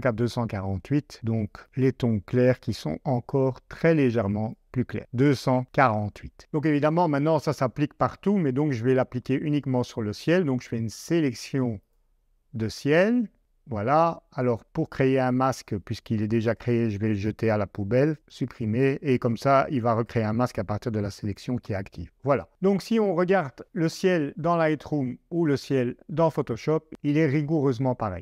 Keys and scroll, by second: 2.1-3.3 typing, 24.5 super+Tab.